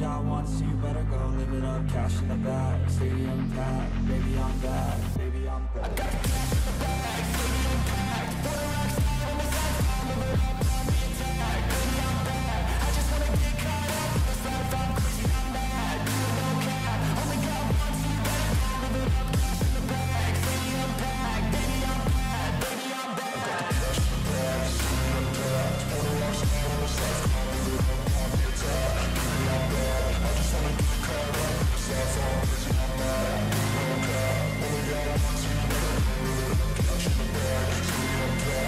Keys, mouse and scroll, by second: 5.4-6.0 scroll down 1, 6.0-8.3 scroll down 10, 17.7 double click, 26.3 scroll up 4, 29.6 ctrl+j, 38.0 double click.